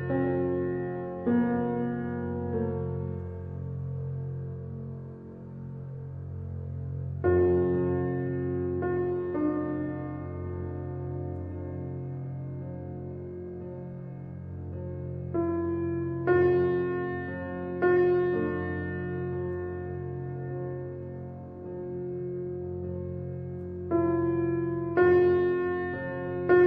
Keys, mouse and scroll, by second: 1.1 p, 3.8 Tab, 4.9 click, 5.9 s, 11.4 click, 11.8-12.2 scroll down 1, 12.2-13.0 middle drag, 13.0 click, 13.4 Tab, 14.8 click, 15.2-16.3 scroll up 2, 16.3 alt+click, 18.0-19.2 middle drag, 19.2 e, 26.3 i.